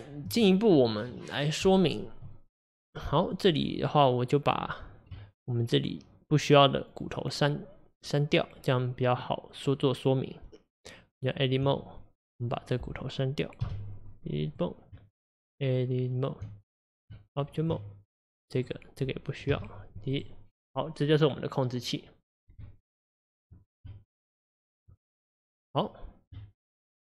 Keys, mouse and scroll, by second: 12.9 click, 14.6 x, 17.7 Tab, 18.6 click, 20.2 x, 25.8 click.